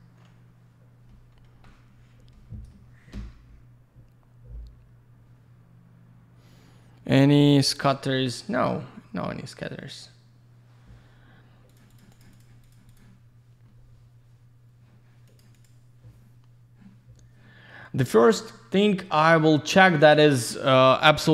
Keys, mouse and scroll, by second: 11.7 ctrl+shift+click, 11.8 ctrl+shift+click, 11.9 ctrl+shift+click, 12.0 ctrl+shift+double click, 12.1 ctrl+shift+click, 12.2 ctrl+shift+click, 12.3 ctrl+shift+click, 12.4 ctrl+shift+double click, 12.6 ctrl+shift+click, 12.7 ctrl+shift+click, 12.9 ctrl+shift+click, 13.0 ctrl+shift+double click, 15.3 ctrl+shift+click, 15.5 ctrl+shift+click.